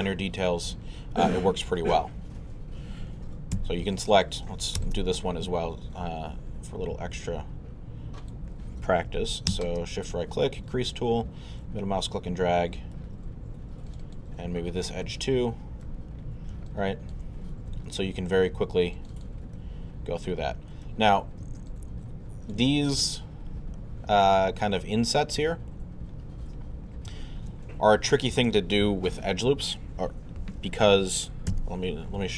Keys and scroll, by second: 3.6 q, 31.5 w.